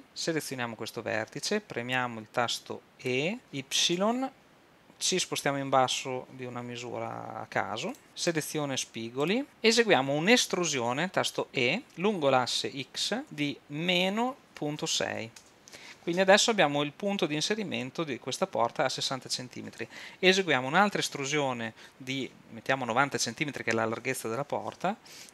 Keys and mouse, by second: 3.1 e, 8.3-9.3 drag, 9.5 super+z, 12.0 e.